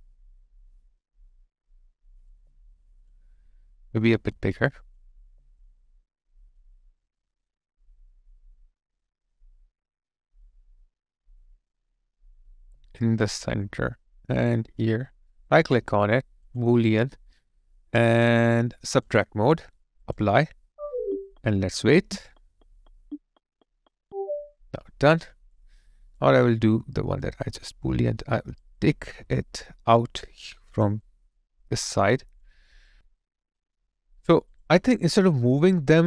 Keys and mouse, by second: 2.3 alt+click, 5.1 alt+click, 12.5 alt+click, 15.3 right click, 21.8 alt+right click, 25.1 alt+click, 28.6 alt+click, 30.2 alt+right click, 31.0 alt+click, 32.7 alt+right click, 35.6 alt+click.